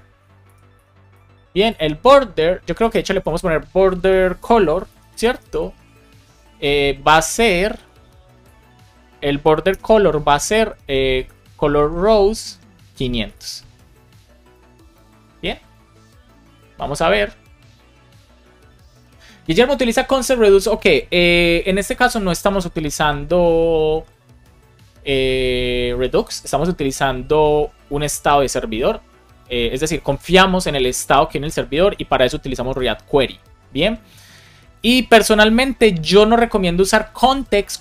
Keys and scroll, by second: 0.4 BackSpace, 1.6 BackSpace, 9.6 BackSpace, 12.8 Return, 13.3 super+s, 14.5 alt+shift+f, 14.9 super+s.